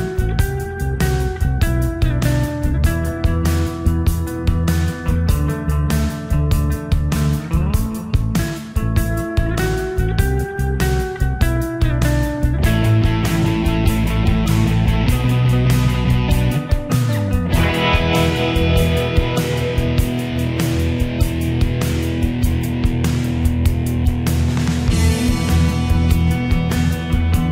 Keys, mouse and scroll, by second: 6.4 click, 11.1-13.8 drag, 17.9 click.